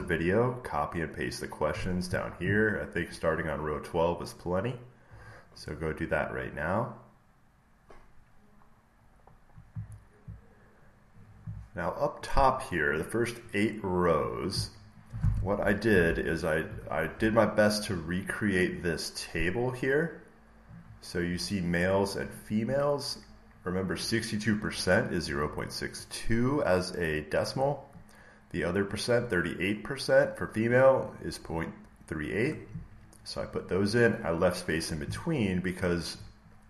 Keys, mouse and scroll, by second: 8.6-11.0 scroll, 11.0 scroll up 3, 14.0 click, 15.2 click, 16.0 alt+Tab, 20.5-22.6 drag.